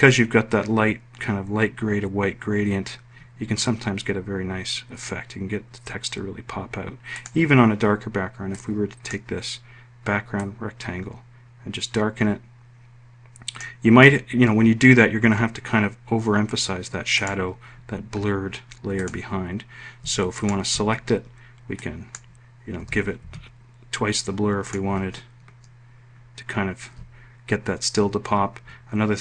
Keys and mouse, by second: 21.8 click, 22.8 2, 23.3 Tab, 24.7 click.